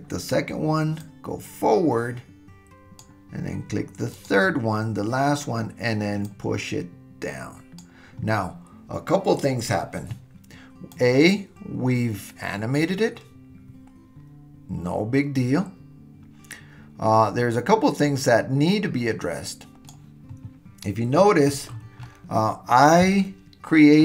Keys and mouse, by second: 1.1-3.0 drag, 4.2 click, 6.2-7.8 drag, 10.9-19.9 drag, 23.2-24.0 shift+middle drag.